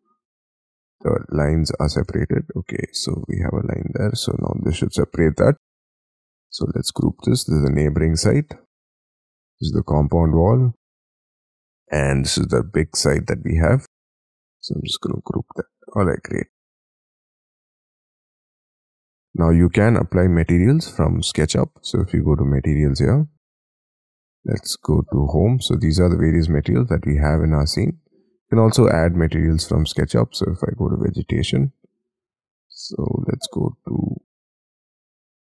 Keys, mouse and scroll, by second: 1.2-1.8 scroll up 10, 1.8-3.9 typing, 4.4 double click, 4.8-6.3 scroll down 39, 6.7 double click, 7.0 g, 7.2-7.9 scroll down 10, 7.9-9.3 scroll up 16, 9.3 double click, 9.8 g, 10.1-10.6 scroll down 10, 11.1 double click, 11.5-12.3 scroll down 12, 12.3 middle click, 13.4 scroll up 4, 14.4 g, 15.5-15.9 scroll down 7, 15.9-16.3 scroll, 16.3 middle click, 17.1-17.6 scroll up 6, 17.8 middle click, 21.2-24.7 scroll up 3, 26.0-27.0 scroll down 10, 27.0-28.7 scroll up 9, 28.7-30.6 scroll up 3, 30.6-33.3 scroll down 1, 33.3-35.5 scroll down 2.